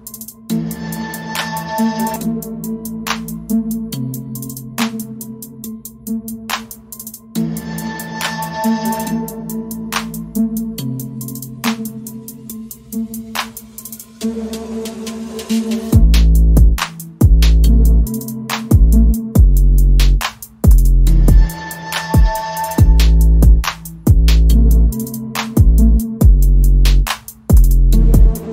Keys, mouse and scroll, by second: 0.1 shift+middle click, 1.0 ctrl+r, 2.3 shift+middle click, 6.6 middle click, 6.8 ctrl+r, 8.3 ctrl+r, 9.0 ctrl+r, 10.3 middle click, 10.4 shift+middle click, 12.6 middle click, 13.2 middle click, 13.6 shift+middle click, 14.3 right click, 15.2 click, 15.6 middle click, 15.8 g, 16.7 middle click, 16.9 shift+middle click, 17.7 middle click, 18.1 middle click, 18.6 g, 19.6 middle click, 20.0 middle click, 21.0 middle click, 21.5 shift+middle click, 21.7 middle click, 22.9 middle click, 23.8 middle click, 24.3 middle click, 25.0 middle click, 25.5 shift+right click, 25.7 shift+right click, 25.8 middle click, 26.0 middle click, 27.6 KP_1, 28.1 shift+d.